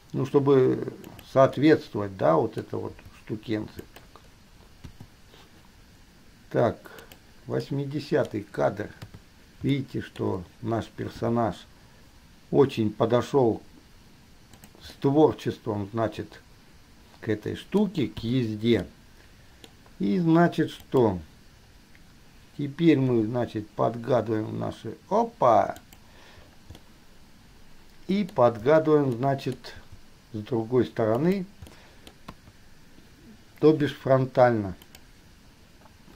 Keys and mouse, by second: 1.9-2.9 middle drag, 5.1 i, 7.2 click, 7.8 drag, 8.1-8.6 middle drag, 9.2 KP_3, 10.1 shift+middle drag, 11.4 g, 15.1-18.2 middle drag, 18.4 i, 19.1-21.2 middle drag, 23.3 g, 27.2-28.6 middle drag, 29.3 click, 29.9 g, 31.9 click, 32.7 KP_1, 35.1 click.